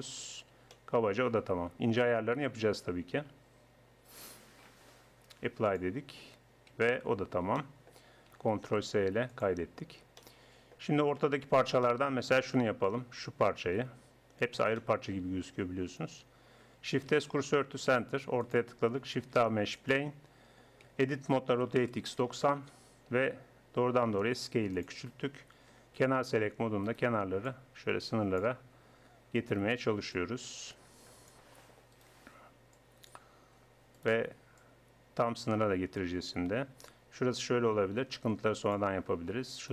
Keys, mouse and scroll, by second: 0.3 middle click, 5.7-6.7 drag, 6.7 Tab, 7.1 Tab, 8.6 ctrl+s, 9.8 middle click, 11.9 middle click, 13.8-14.8 middle drag, 17.1 shift+s, 18.5-20.2 drag, 19.2 shift+a, 20.9 Tab, 21.5 r, 23.8 s, 26.0 click, 26.9 middle click, 29.1 click, 29.4 right click, 31.3 click, 31.9 right click, 33.8 click, 34.0-35.9 middle drag, 35.9 click, 39.6 right click.